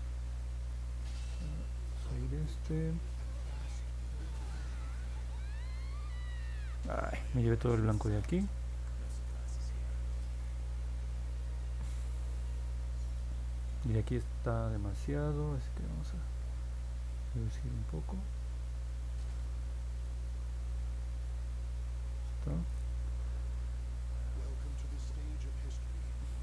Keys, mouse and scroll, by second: 0.5 click, 0.7 click, 1.0 click, 1.3 click, 1.5 click, 1.8 click, 3.3 click, 3.7 click, 4.9 click, 5.2 click, 6.1 click, 7.5 ctrl+z, 7.8 ctrl+z, 8.3 ctrl+z, 15.6 click, 15.9 click, 16.6 click, 16.9 click, 17.2 click, 17.5 click, 17.9 click, 18.3 click, 18.5 click, 18.8 click, 19.8 click, 20.1 click, 21.1 click, 21.6 click, 22.1 click, 26.2 click.